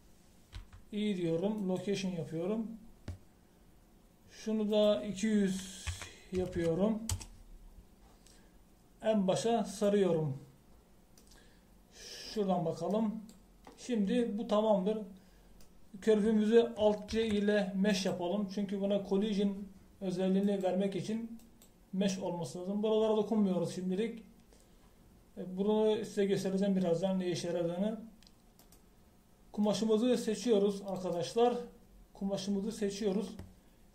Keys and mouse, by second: 0.4 ctrl+z, 1.6 i, 7.5 KP_0, 18.1 alt+c, 29.6-31.1 middle drag, 31.4 middle click, 31.5 middle click, 32.2 middle click.